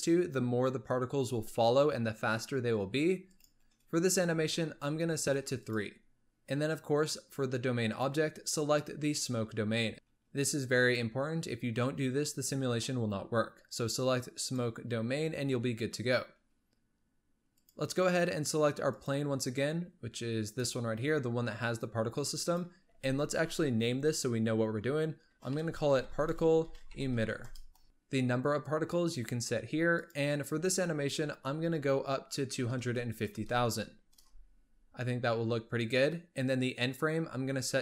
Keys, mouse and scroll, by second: 3.2-5.7 drag, 7.8-9.9 drag, 10.7-13.9 drag, 17.4 click, 18.8 click, 20.4 click, 22.2 click, 22.4-25.6 drag, 27.1 t, 29.9-33.0 drag, 33.0 KP_0, 33.6 KP_0, 36.7-37.8 drag.